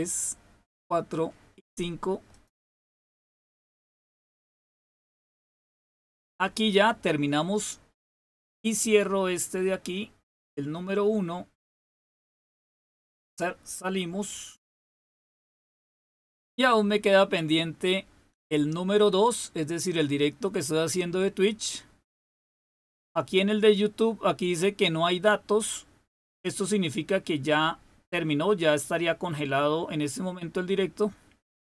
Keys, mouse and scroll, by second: 2.3 click, 13.6 click, 20.7 click, 30.1-31.6 drag.